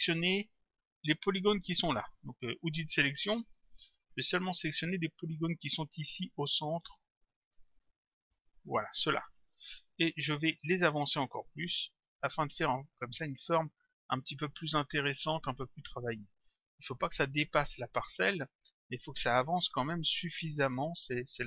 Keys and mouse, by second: 2.8 click, 5.2 click, 6.0 shift+click, 11.1 click, 15.3 click, 17.0 click, 18.3 click.